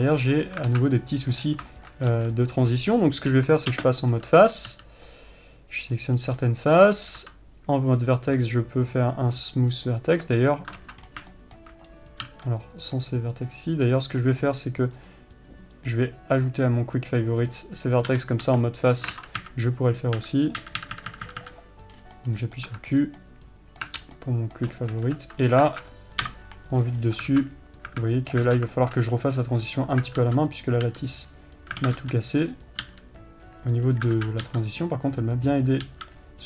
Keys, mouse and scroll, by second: 0.9 c, 1.0 right click, 1.2 alt+z, 1.5-3.8 middle drag, 1.9-2.2 scroll down 1, 3.7 c, 3.8 3, 4.3 space, 4.5-5.1 scroll up 1, 7.0-8.3 middle drag, 8.3-11.8 right drag, 11.6 scroll down 1, 11.8-14.2 shift+middle drag, 14.2-22.7 right drag, 21.9 q, 22.5 scroll down 1, 22.7-28.8 middle drag, 23.4 scroll up 1, 25.5-26.2 scroll up 2, 27.4-27.7 scroll up 2, 28.8 click, 29.3-30.2 shift+middle drag, 34.7 alt+z.